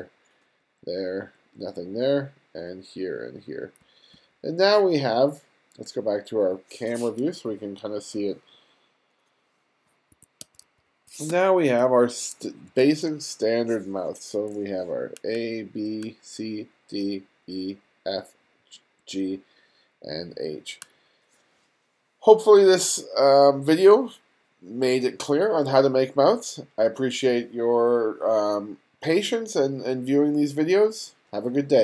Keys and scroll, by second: 0.3 ], 1.0 ], 3.1 ], 3.5 [, 10.1 1, 11.0 space, 12.4 2, 14.5 ], 15.5-18.7 typing, 19.8 [.